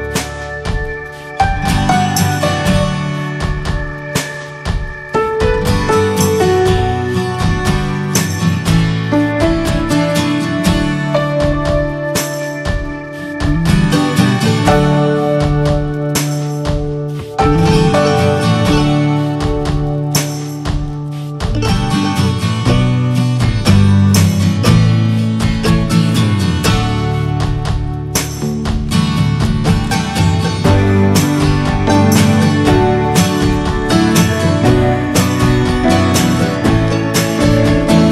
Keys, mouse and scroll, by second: 0.2 ctrl+z, 4.7-8.2 right drag, 8.2 f, 11.9 ctrl+click, 12.6-13.7 middle drag, 13.7 ctrl+z, 15.1 alt+scroll up 2, 15.2 alt+middle click, 16.3 alt+middle click, 17.0-20.1 shift+middle drag, 20.1 click, 20.6-22.3 shift+middle drag, 22.3 scroll up 1, 22.5-22.9 scroll down 1, 22.9 middle click, 23.2-23.7 scroll down 1, 23.7 shift+middle click, 25.7 click, 26.1 scroll up 2, 26.6-31.3 shift+middle drag, 31.3 click, 36.5 ctrl+click, 37.0 scroll down 2, 37.2-38.1 middle drag.